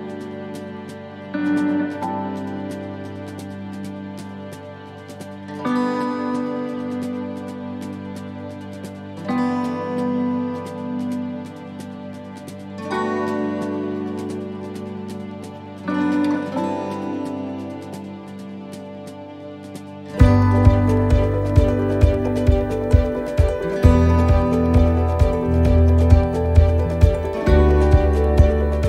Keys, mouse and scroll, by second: 0.4 r, 2.4 click, 5.3 shift+middle click, 6.7-7.5 scroll up 2, 7.2 right click, 8.4 middle click, 10.0-13.0 typing, 14.0 shift+d, 15.1 click, 17.6 middle click, 18.8 s, 21.0 click, 22.0 middle click, 22.2-22.8 scroll down 3, 23.2 a, 24.3 click.